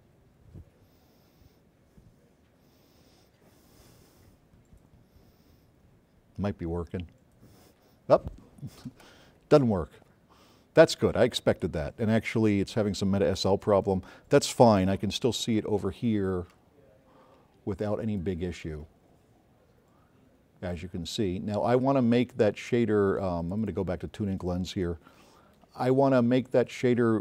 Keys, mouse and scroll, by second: 11.9 scroll up 2, 12.5-12.8 scroll down 2, 15.9 click, 17.2 q, 17.7-20.4 drag, 25.6 click.